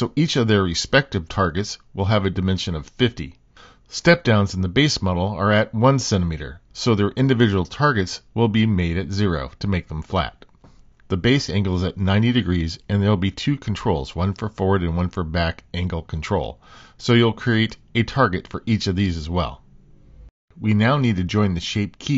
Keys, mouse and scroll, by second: 0.5 shift+middle click, 0.6 middle click, 2.0 middle click, 2.2 middle click, 2.6 shift+middle click, 2.8 Tab, 3.0 click, 3.4 g, 3.9 shift+middle click, 4.1 middle click, 4.4 Tab, 4.6 middle click, 4.8 Tab, 5.3 shift+d, 6.0 middle click, 6.3 Tab, 6.8 shift+middle click, 7.0 middle click, 7.3 g, 7.8 middle click, 8.1 middle click, 8.5 Tab, 8.8 click, 9.1 shift+f, 9.2 Escape, 9.3 shift+d, 9.8 middle click, 10.0 middle click, 10.3 middle click, 10.5 Tab, 12.5 click, 12.8 click, 13.3 click, 13.5 middle click, 13.9 r, 14.7-16.4 middle drag, 16.7 super+z, 16.9 middle click, 17.8 Tab, 18.6 shift+click, 18.9 click, 19.1 shift+click, 19.4 r, 19.9 r, 20.3 middle click, 20.9 click, 21.9 g.